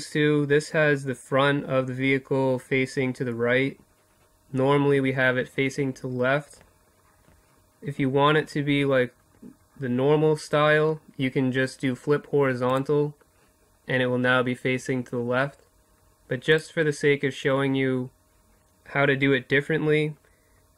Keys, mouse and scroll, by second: 11.1-12.9 drag, 14.9-20.7 drag.